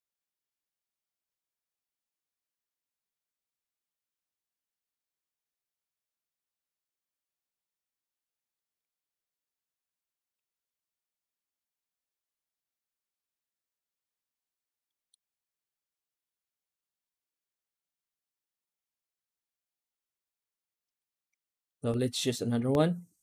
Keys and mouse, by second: 0.3-6.0 drag, 8.4 shift+middle drag, 11.6 middle click, 14.7 middle drag, 19.7 z, 21.4 middle drag, 21.8 middle drag, 22.5 ctrl+s.